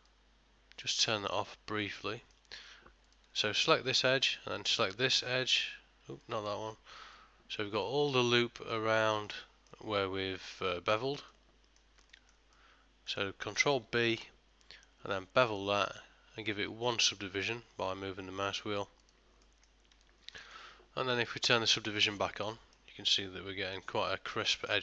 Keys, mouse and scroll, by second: 0.1 click, 2.1 middle click, 3.1 alt+click, 4.6 alt+shift+click, 6.6 alt+shift+click, 7.2 middle click, 8.4 middle click, 9.2 ctrl+middle click, 9.5 shift+middle click, 11.4 middle click, 12.2 shift+middle click, 12.6 middle click, 14.1 ctrl+b, 19.5 middle click, 20.0 Tab, 20.5 ctrl+middle click, 22.2 click, 22.8 middle click.